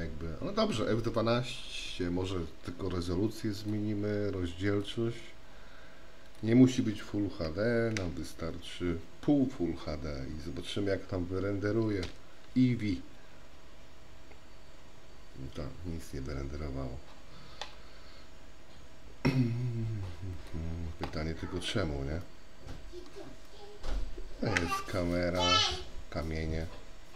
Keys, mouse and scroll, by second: 3.7 click, 4.8 click, 6.5-10.0 drag, 13.1 F12, 22.5 middle click, 23.8 middle click, 25.0 KP_0.